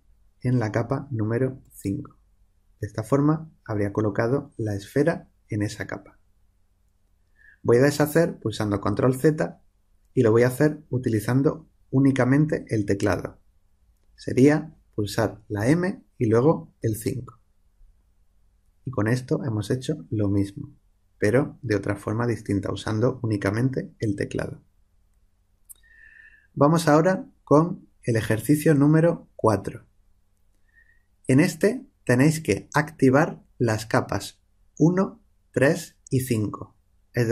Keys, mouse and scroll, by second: 8.7 ctrl+z, 15.5 m.